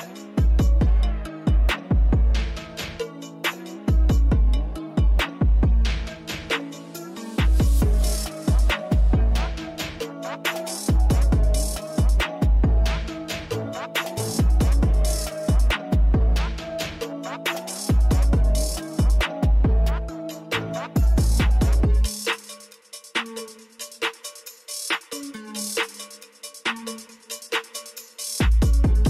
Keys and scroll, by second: 15.1 5, 15.8 Return, 21.4-23.7 typing, 24.4 Return.